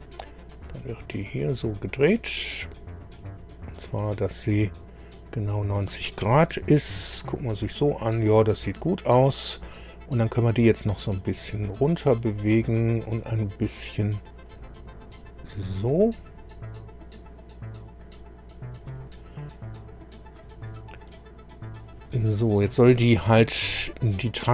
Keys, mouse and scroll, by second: 0.6-4.7 drag, 5.0 middle click, 6.4 KP_1, 7.0 KP_3, 8.4 KP_1, 11.2 click, 14.4-19.0 drag, 20.2 click, 21.1 middle click, 22.2 shift+middle click, 23.2-24.5 middle drag.